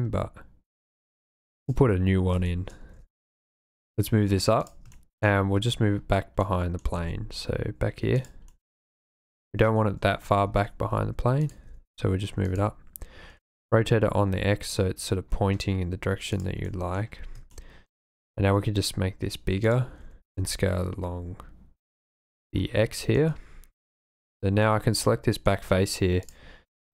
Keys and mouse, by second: 2.5 shift+middle click, 2.9 g, 3.1 z, 4.6 drag, 5.0 shift+middle click, 6.4-6.8 drag, 6.9 g, 8.2 click, 8.5-9.2 drag, 10.4-13.4 typing, 11.4 click, 12.5 click, 16.4 click, 16.7 click, 17.5-18.0 shift+middle drag, 18.5 s, 19.6 click, 19.9 s, 20.0 y, 20.4 x, 22.2 click, 24.2-25.5 drag, 26.3 click, 26.7 click.